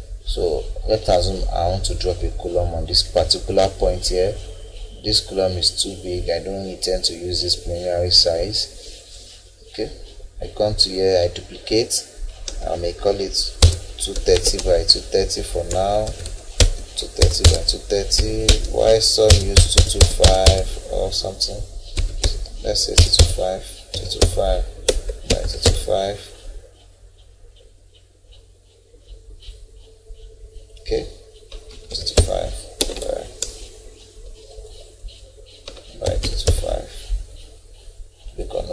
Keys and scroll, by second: 12.5 0, 13.6 BackSpace, 14.1 2, 14.3 3, 16.6-19.3 typing, 21.9-24.2 typing, 31.7 2, 32.8 Tab, 36.0 2.